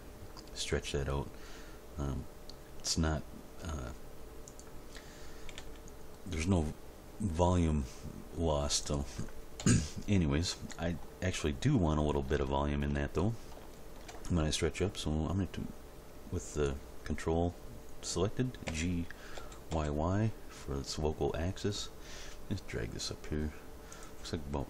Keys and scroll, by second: 5.5 g, 9.6 End, 18.7 g, 19.3 y.